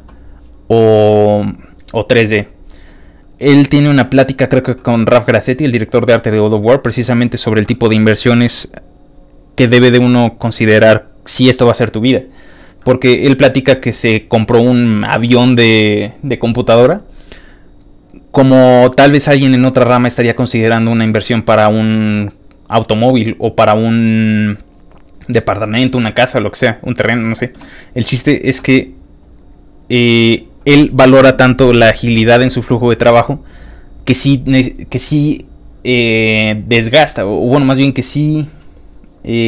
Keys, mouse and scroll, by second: 1.3 middle click, 1.4-2.7 scroll down 5, 2.8 scroll up 1, 3.4 scroll up 1, 6.1 scroll down 2, 13.1 middle click, 13.2 scroll up 1, 13.6 middle click, 14.1-18.2 middle drag, 28.2-28.5 scroll down 3, 28.6 middle click, 29.2 middle click.